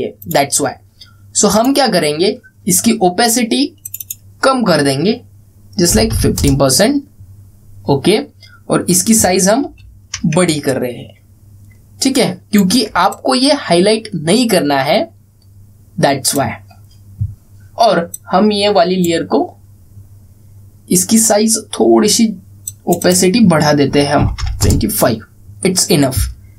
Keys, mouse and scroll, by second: 0.9 click, 4.6 click, 9.9 click, 10.3 ctrl+t, 11.4-13.6 alt+drag, 23.4 click.